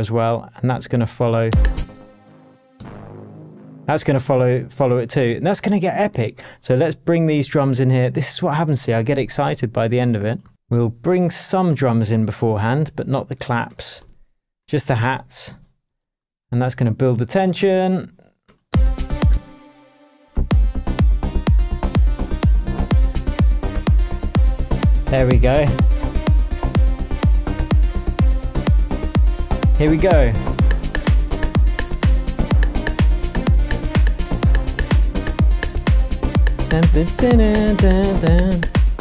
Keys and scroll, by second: 1.4 space, 2.8 space, 3.9 space, 10.5 space, 13.9 BackSpace, 15.4 shift+BackSpace, 15.5 shift+Tab, 18.6 space, 23.1 BackSpace, 23.8 shift+BackSpace, 23.9 shift+Tab, 36.5 super+d.